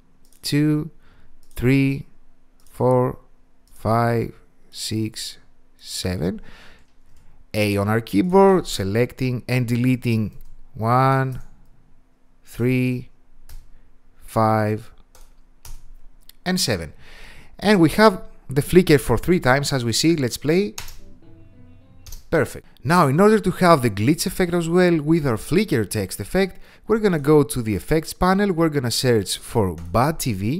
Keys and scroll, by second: 7.6 a, 10.1 BackSpace, 11.0 BackSpace.